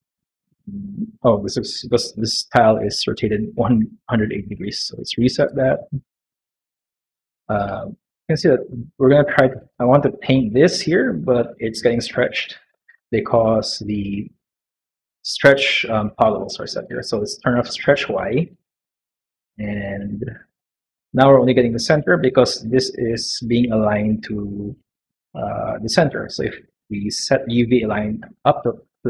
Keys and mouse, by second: 0.2 middle click, 4.4 shift+q, 5.2 shift+q, 5.9 q, 7.6 middle click, 11.8 middle click, 12.3 shift+middle click, 13.0 middle click, 18.1 click, 28.1 click.